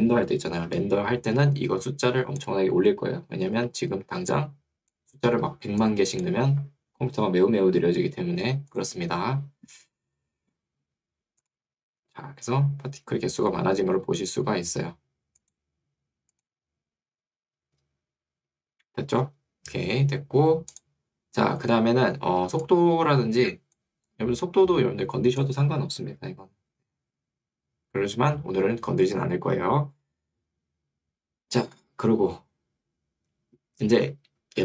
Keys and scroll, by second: 3.6 Escape, 6.6 Escape, 22.6 2, 26.2 Escape.